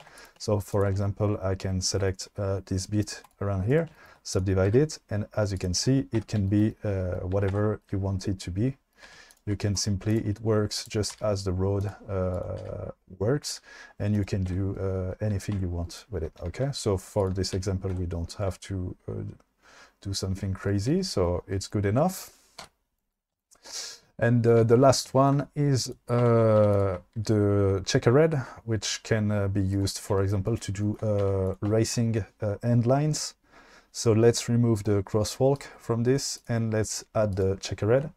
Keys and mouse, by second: 0.2 click, 0.7 shift+click, 3.4-3.9 right drag, 4.6 g, 6.2 Tab, 7.6 Tab, 9.3 shift+click, 9.9 right click, 10.8 click, 11.2 g, 12.3 click, 12.7 g, 14.5 Tab, 15.6 Tab, 16.6 ctrl+x, 17.2 click, 17.6 ctrl+x, 18.0 Tab, 22.6 KP_5, 25.9 click, 26.3 Tab, 26.7 2, 26.7 click, 27.3 shift+d, 29.7 click, 31.5 click, 31.5 2, 34.9 click, 35.6 click, 37.4 click.